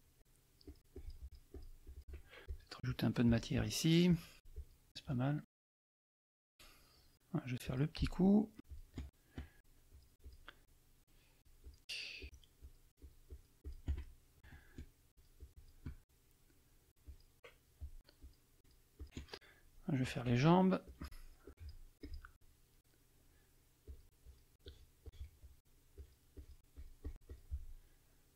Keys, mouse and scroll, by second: 0.6 shift+click, 1.8 shift+click, 2.4 shift+click, 2.8 shift+click, 3.2 shift+click, 4.0 shift+click, 5.9 middle click, 6.4 click, 7.6 click, 8.6 shift+click, 9.8 shift+click, 11.4 shift+click, 12.2 shift+click, 13.0 shift+click, 14.0 shift+middle click, 15.1 shift+click, 16.9 shift+click, 17.0 shift+click, 18.2 shift+click, 18.6 shift+click, 19.0 shift+click, 20.8 shift+click, 21.4 shift+click, 22.0 shift+click, 23.8 shift+click, 24.6 shift+click, 25.9 shift+click.